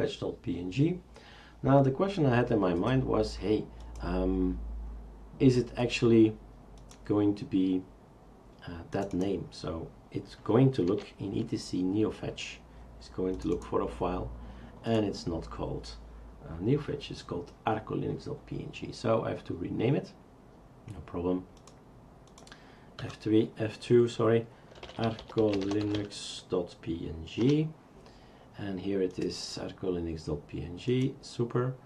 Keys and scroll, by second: 10.9 n, 23.0 F2, 24.5-26.5 typing, 27.4 Return.